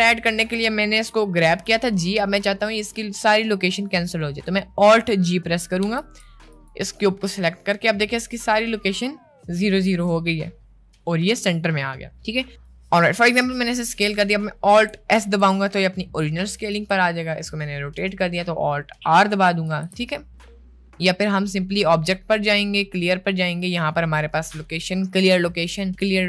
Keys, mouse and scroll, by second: 1.7 g, 3.1 middle click, 5.8 alt+g, 7.7 middle click, 12.6 right click, 13.5 s, 15.1 alt+s, 16.7 r, 21.3 click, 21.9-26.2 drag.